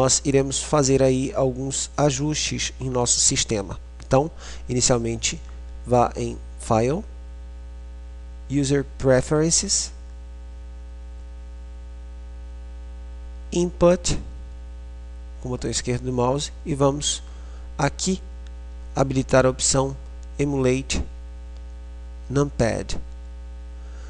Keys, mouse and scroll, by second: 6.9 middle click, 7.3-8.6 drag, 8.6 middle click.